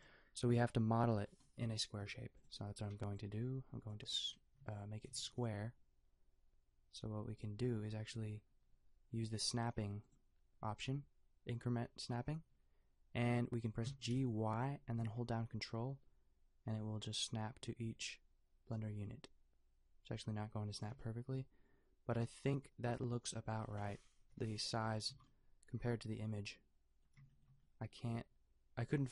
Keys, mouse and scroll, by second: 2.0 b, 2.9 b, 4.5 g, 5.1 g, 10.0-13.8 drag, 13.8 g, 24.2 KP_5, 25.1 a.